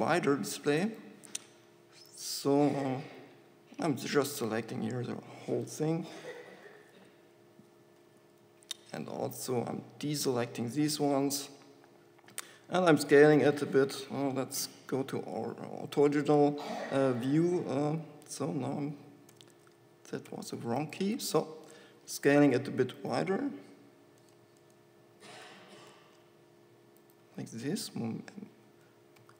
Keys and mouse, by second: 3.3 b, 6.9 KP_7, 8.3 b, 12.5 s, 14.2 KP_5, 14.8 y, 17.9 z, 19.7 z, 20.7 g, 21.3-23.0 drag, 21.5 s, 24.5 click, 25.6 s.